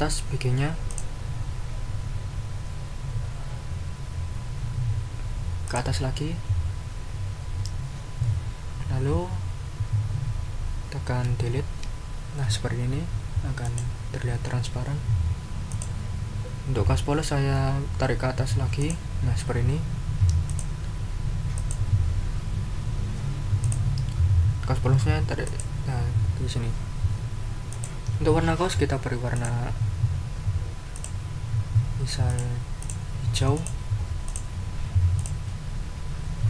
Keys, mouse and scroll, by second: 0.9 scroll up 1, 5.6 click, 11.6 Delete, 13.6 click, 15.7 click, 18.8 click, 20.5 click, 21.5 click, 23.6 click, 25.4 click, 27.7 click, 29.3 click, 30.9 click, 32.2 click, 32.8 click, 33.5 click, 34.2 click, 35.2 click.